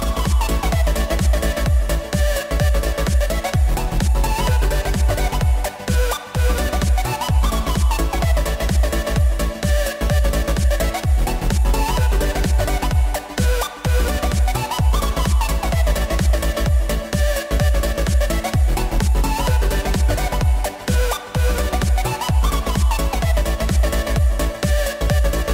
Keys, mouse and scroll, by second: 0.1 scroll up 2, 0.3-0.8 shift+middle drag, 0.8 s, 6.1 click, 6.9 KP_7, 7.7 s, 10.6 s, 11.8 KP_1, 12.1-12.6 scroll up 3, 12.6 s, 15.4 click, 15.6 scroll down 4, 15.8-16.6 middle drag, 16.6 click, 17.3 drag, 17.7 click, 18.2 KP_3, 18.6-19.0 scroll up 2, 19.0 s, 20.3-20.7 middle drag, 20.7-21.1 scroll up 1, 21.1 click, 21.3-21.8 scroll down 1, 21.8 drag, 23.5 Tab, 24.1 u, 24.8 Tab.